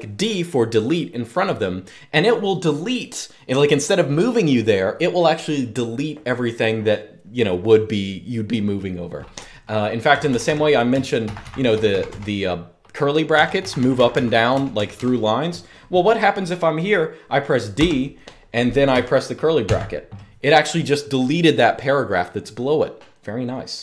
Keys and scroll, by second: 9.8-11.8 typing, 13.1-14.7 typing, 17.5 typing, 19.4 typing, 23.5 u.